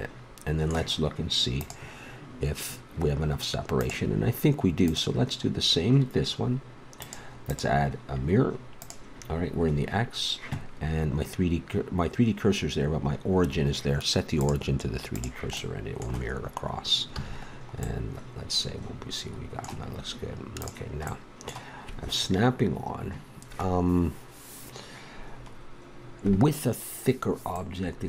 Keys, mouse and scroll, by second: 4.8-6.8 drag, 6.9-9.3 drag, 14.4-15.6 drag, 15.6 middle click, 17.1 a, 18.0-19.5 middle drag, 20.6 right click, 21.1-25.2 middle drag, 27.6-28.0 middle drag.